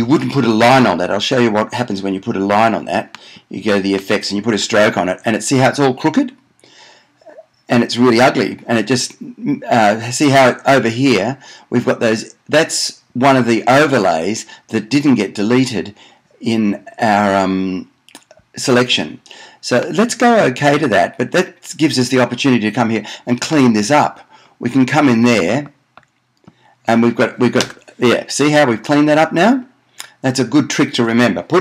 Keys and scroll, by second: 27.9 BackSpace.